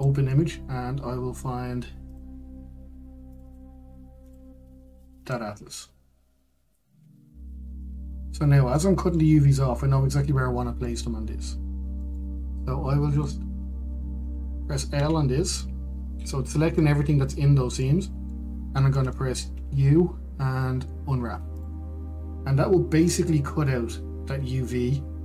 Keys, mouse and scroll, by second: 12.1 middle click, 13.3-14.5 shift+middle drag, 14.5-16.3 drag, 16.9-22.9 middle drag, 22.9 u.